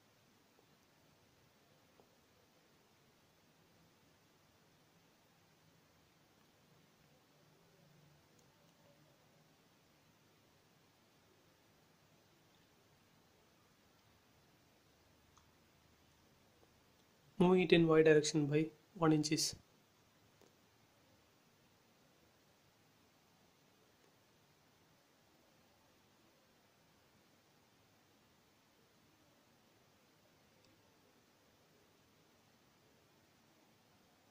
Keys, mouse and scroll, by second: 1.8 scroll up 1, 2.8 shift+click, 4.9 m, 5.3 click, 6.5 Left, 7.2 1, 7.8 shift+', 8.0 Return, 8.3 scroll down 1, 8.9 scroll down 1, 9.6 scroll down 1, 10.1 click, 11.0 middle click, 11.6 scroll up 1, 11.9 shift+middle click, 12.1 middle click, 12.9 scroll up 1, 13.2 middle click, 13.9 click, 15.0 middle click, 15.6 scroll down 1, 16.1 middle click, 16.8 scroll up 1, 17.6 m, 17.8 click, 18.9 Left, 19.7 1, 20.2 shift+', 20.4 Return, 20.7 space, 20.9 middle click, 21.6 shift+scroll up 1, 21.9 shift+middle click, 22.8 scroll down 1, 23.5 click, 23.8 scroll up 1, 24.7 middle click, 24.8-27.8 middle drag, 27.8 scroll down 1, 29.1-34.3 middle drag.